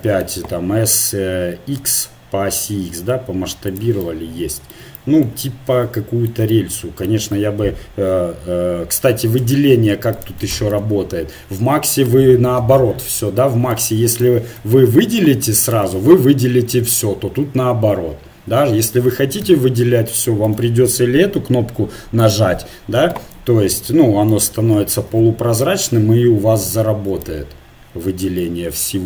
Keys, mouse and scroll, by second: 0.6 s, 7.3 KP_1, 9.6 ctrl+Tab, 12.1 a, 13.7-16.7 drag, 16.8-18.8 middle drag, 19.4 KP_1, 22.2-23.9 drag, 23.9 a, 25.1 KP_1, 25.8-27.9 drag, 27.9-29.0 middle drag.